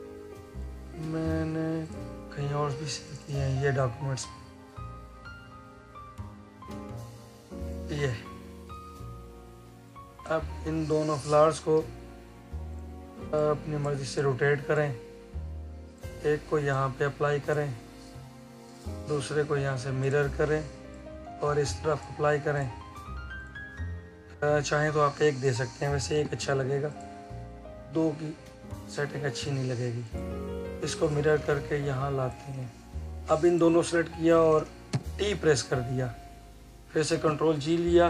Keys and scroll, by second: 37.0 ctrl+g.